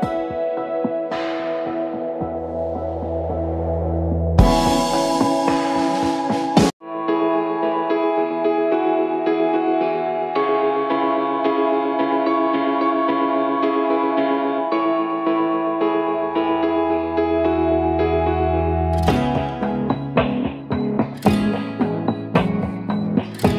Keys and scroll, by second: 3.9 Up, 4.2 Left, 6.9 ctrl+d, 9.4 ctrl+g, 10.2-12.2 typing, 11.9 ctrl+a, 13.6 ctrl+d, 13.9 shift+Right, 14.1 shift+Right, 14.6 shift+Down, 14.8 shift+Down, 15.0 shift+Down, 15.3 shift+Down, 15.9 ctrl+-.